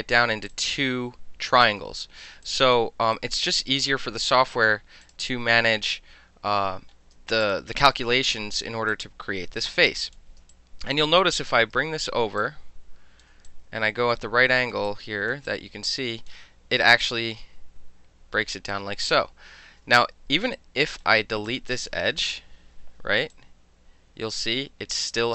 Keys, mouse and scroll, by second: 0.5-2.3 alt+drag, 2.4 alt+click, 3.1-3.7 right drag, 4.2 click, 5.0 shift+click, 7.4 shift+click, 8.9 alt+click, 10.0 alt+click, 10.5-11.2 alt+drag, 11.5 w, 12.4-13.2 drag, 13.5-14.7 alt+drag, 14.7 alt+middle click, 14.8-15.3 alt+drag, 15.3 alt+middle click, 15.5 alt+click, 16.3-17.0 alt+middle drag, 17.0-19.1 alt+drag, 20.0-20.3 alt+drag, 20.5 right click, 20.8 click, 21.0-21.5 middle drag, 21.5 click, 21.6-23.3 middle drag, 23.3-25.3 alt+drag.